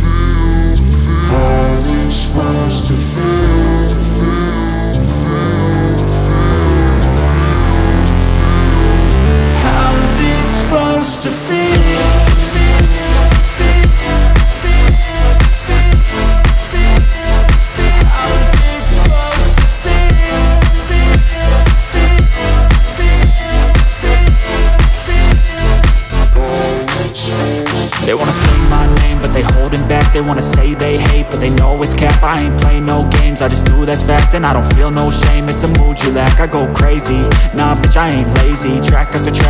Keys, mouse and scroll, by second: 4.8 ctrl+z, 5.2 click, 8.7 click, 14.6 click, 23.3 click, 27.0 click.